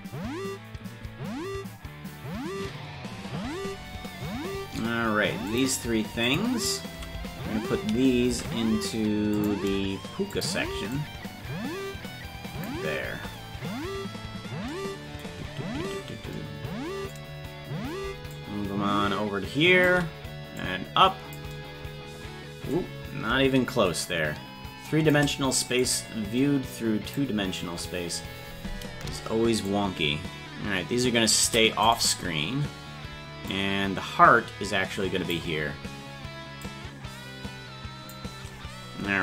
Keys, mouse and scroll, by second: 5.5 click, 6.2 shift+click, 8.3 ctrl+Tab, 9.3 click, 10.3 shift+click, 10.9-12.7 drag, 14.2-14.7 scroll down 5, 15.3-15.6 scroll down 1, 16.3 scroll down 10, 18.3-19.9 shift+drag, 20.5 click, 22.8-23.3 scroll down 1, 24.0-25.1 shift+drag, 24.0-24.7 scroll down 1, 25.8-27.1 drag, 27.6 KP_0, 29.6-31.9 shift+drag, 31.9 right click, 33.5-35.3 drag, 36.6-38.1 drag.